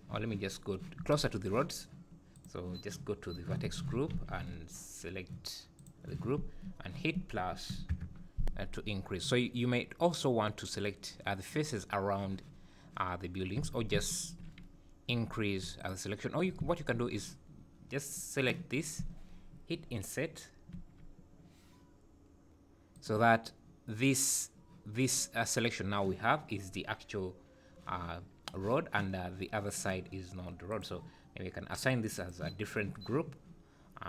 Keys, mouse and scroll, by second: 1.0 Tab, 2.4 click, 3.7 Tab, 4.1 alt+a, 5.8 click, 7.9 ctrl+KP_Add, 13.6 alt+a, 13.9 `, 15.1 3, 15.8 alt+click, 18.1 click, 20.7 i, 30.7 click, 31.7 click, 31.9 click, 32.1 click.